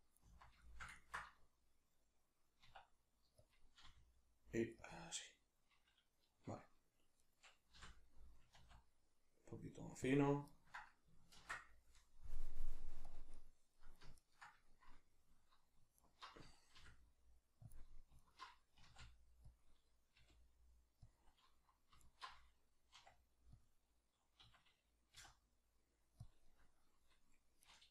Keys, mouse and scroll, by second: 0.7-3.5 ctrl+shift+middle drag, 2.7 e, 3.5 click, 3.9 r, 4.9 click, 7.2 right click, 7.7 l, 10.1 click, 10.5-13.5 ctrl+middle drag, 11.4 ctrl+r, 13.5 right click, 16.0 alt+right click, 16.8 r, 17.7 click, 18.2 alt+right click, 18.7 s, 19.6 click, 20.2 g, 21.1 click, 22.0 alt+right click, 22.9 r, 23.7 click, 24.4 s, 26.3 click, 27.6 right click.